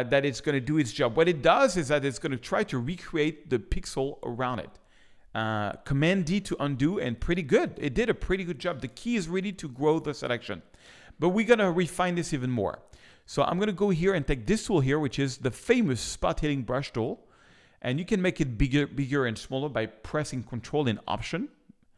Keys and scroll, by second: 6.2 super+d, 6.9 super+space, 9.1 space.